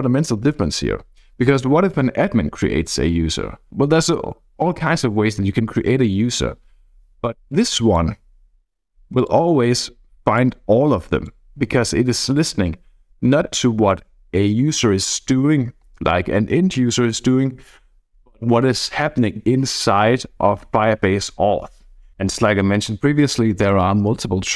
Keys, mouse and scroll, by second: 7.5 click, 9.2 click, 9.5-10.3 scroll down 2, 10.4-11.6 drag, 12.0 click.